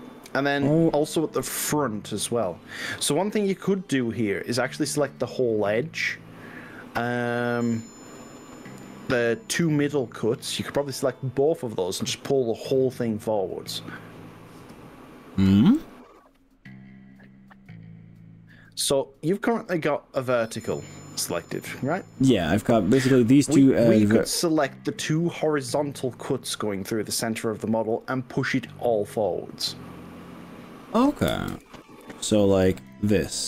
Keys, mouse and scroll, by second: 1.4 y, 3.9 scroll up 1, 4.3 scroll down 1, 29.7 click, 31.3 ctrl+z, 31.9 click, 32.8 click.